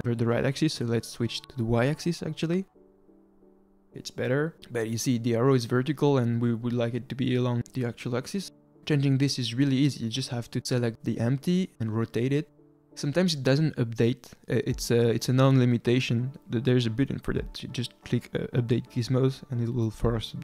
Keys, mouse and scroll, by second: 1.7-3.2 drag, 8.9 scroll down 2, 9.1-10.0 middle drag, 10.0-10.9 scroll down 1, 10.9 r, 16.1 click, 18.5-19.2 scroll down 2, 19.2 click, 19.9-20.4 drag.